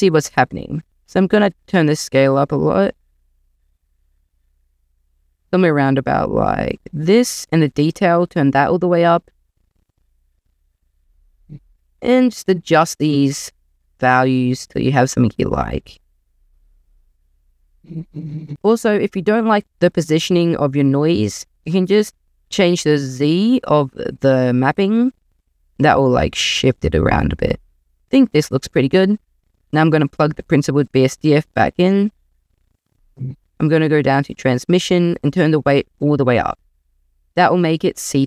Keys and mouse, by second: 0.9-6.9 drag, 7.9 click, 10.7-12.2 drag, 13.1 click, 15.7-18.5 drag, 22.9-28.3 drag, 31.1 click, 34.1-36.1 drag, 36.7 click.